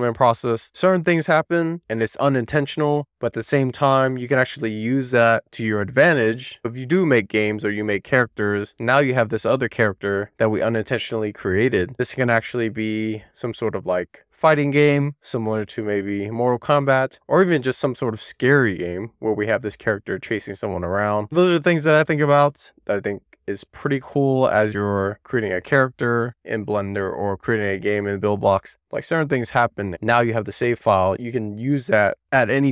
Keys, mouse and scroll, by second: 26.2-27.8 shift+middle drag, 28.5 middle click, 29.8 middle click, 31.0 middle click, 31.7 middle click.